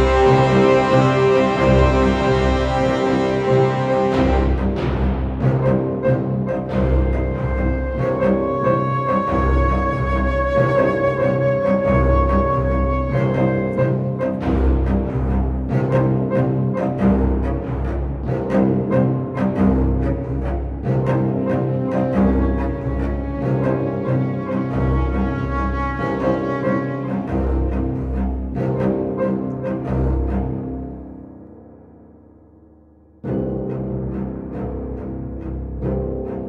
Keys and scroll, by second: 3.4 5, 5.8 5, 19.8 ctrl+j, 32.5 1, 32.9 0, 35.0 Tab, 36.3 3.